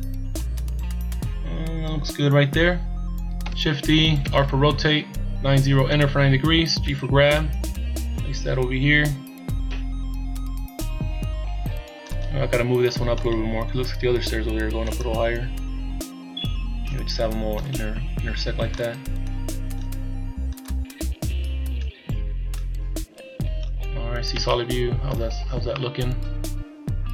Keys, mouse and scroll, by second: 2.6-3.5 scroll down 1, 3.5 shift+d, 6.8 g, 13.2 right click, 13.6 scroll up 1, 14.9 click, 17.6 right click, 18.8 click, 20.7 click, 23.9 scroll down 2, 24.3 z, 24.4 middle click, 25.3-25.8 scroll up 2, 25.8 middle click.